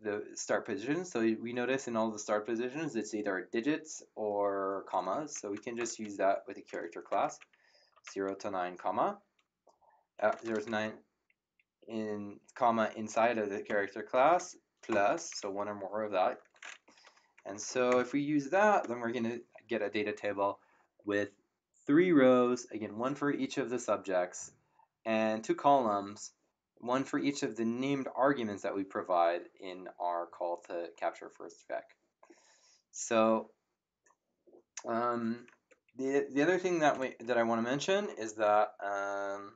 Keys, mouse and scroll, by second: 6.8-8.8 typing, 10.3-10.6 typing, 14.9 shift+=, 16.8 End, 17.3 shift+0, 17.9 Return, 36.9 Up.